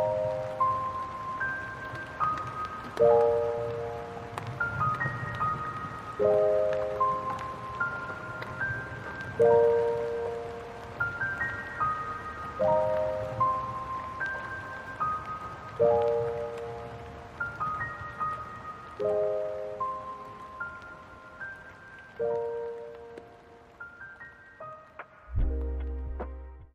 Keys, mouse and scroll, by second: 1.5 right click, 1.8 right click, 3.6 click, 6.0 click, 9.0 click, 12.4 right click, 15.2 click, 17.9 click, 20.5 f.